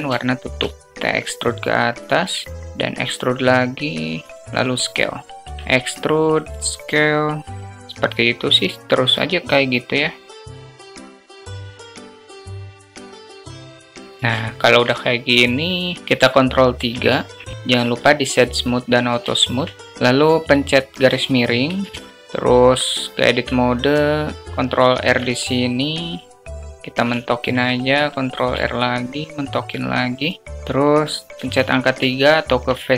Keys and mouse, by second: 0.1 alt+shift+click, 2.3 shift+click, 2.6 s, 4.1 s, 5.4 e, 10.2 click, 10.5 s, 10.6 alt+shift+click, 10.7 e, 11.2 alt+shift+click, 12.3 e, 12.4 s, 12.9 click, 13.3 e, 13.3 s, 13.6 click, 13.9 Tab, 14.4 shift+middle click, 16.7 ctrl+3, 17.6 click, 18.2 q, 19.2 alt+shift+drag, 19.4 middle drag, 21.6 space, 22.1 space, 23.1 Tab, 24.9 ctrl+r, 27.1 alt+shift+click, 28.2 ctrl+r, 31.3 3, 32.0 alt+middle click.